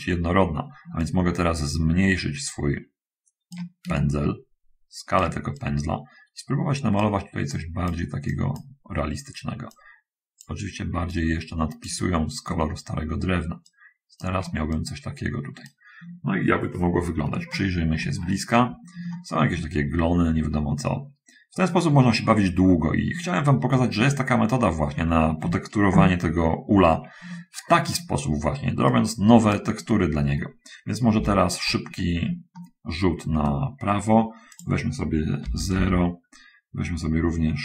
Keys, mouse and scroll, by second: 1.1-4.0 shift+right drag, 4.1-7.3 shift+right drag, 7.8 click, 8.6 click, 10.0 click, 11.4 click, 13.9-16.1 shift+right drag, 17.7 shift+middle click, 19.2 shift+middle click, 20.2-20.6 shift+scroll up 1, 22.1-23.5 shift+middle drag, 24.3 shift+middle click, 29.2 shift+right click, 31.2 1, 32.7 shift+middle click, 34.8 click, 35.7 Return, 35.7 0.